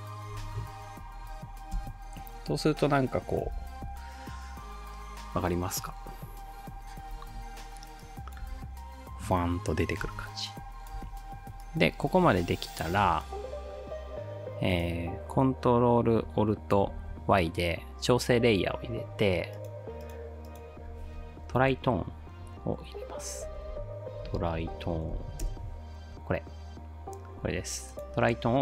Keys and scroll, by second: 1.7 space, 3.5 space, 7.3 space, 8.5 space, 10.1 space, 11.1 space, 16.9 ctrl+alt+y, 21.3-25.7 typing.